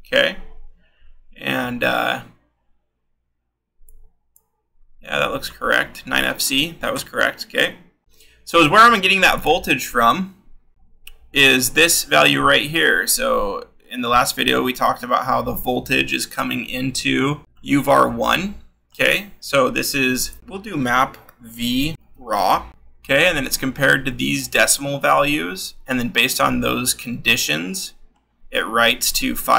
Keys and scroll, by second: 0.1 v, 20.4 v, 21.7-22.8 typing.